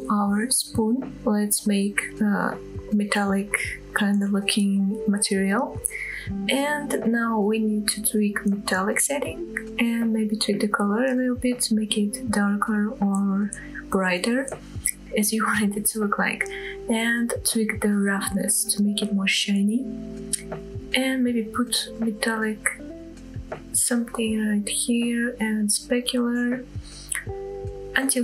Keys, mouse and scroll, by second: 0.5-1.7 drag, 2.3 click, 3.0 click, 4.1-6.6 scroll down 2, 6.6-8.3 drag, 9.4 click, 15.1-17.9 drag, 19.5-23.4 drag, 23.9-25.7 drag, 26.2 scroll up 1, 27.8-28.2 drag.